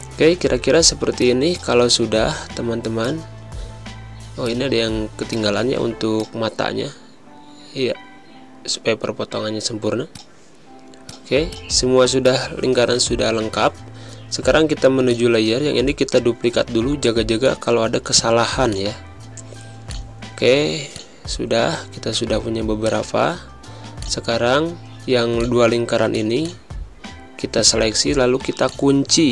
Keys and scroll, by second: 0.2 v, 4.4 space, 5.2 v, 7.4 Up, 8.0 Down, 8.4 Right, 10.8 z, 11.6 space, 22.1 v, 27.5 ctrl+g.